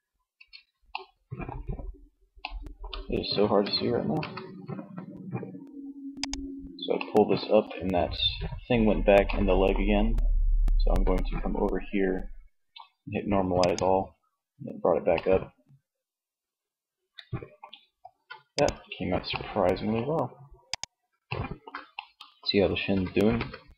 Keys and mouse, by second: 2.7 r, 5.2 click, 5.9-7.1 middle drag, 12.6-14.2 drag, 14.2 middle click, 17.0 ctrl+s, 18.4-19.8 middle drag, 20.2-21.3 middle drag, 22.0 r.